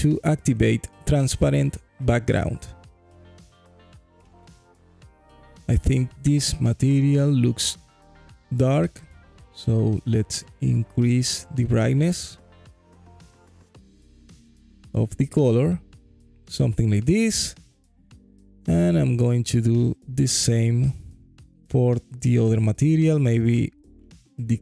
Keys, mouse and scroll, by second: 2.7-3.8 alt+drag, 7.8 click, 8.7 middle click, 8.9 click, 9.7 click, 16.2 alt+click, 18.5 click, 19.8 middle click, 22.4-24.6 drag.